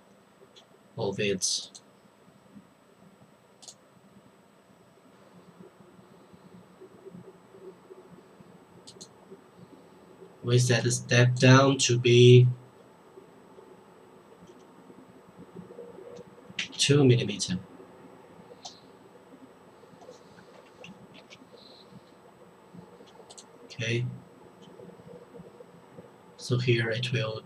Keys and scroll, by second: 16.6 2, 20.6 Return, 21.1 Tab.